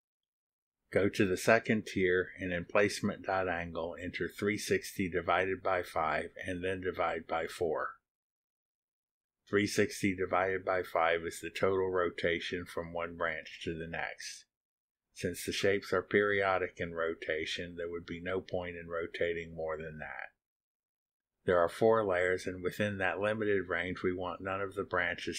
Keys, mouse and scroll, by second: 2.4 click, 4.3 scroll up 2, 6.9 click, 8.4 click, 9.6-12.7 typing, 14.9 /, 15.2 4, 18.1 click.